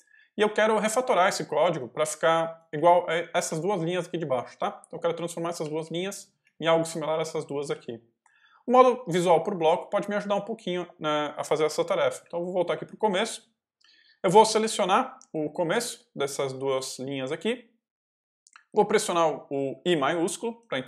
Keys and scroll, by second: 2.1-3.9 typing, 5.1-8.1 typing, 10.3 k, 12.1 0, 15.6 ctrl+v, 16.5 ctrl+y, 16.9 ctrl+j, 20.4 shift+i.